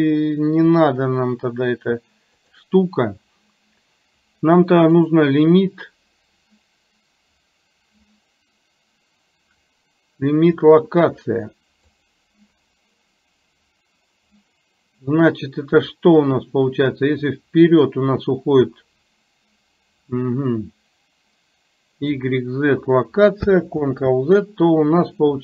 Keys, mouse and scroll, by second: 5.1-12.2 drag, 17.5-22.4 drag.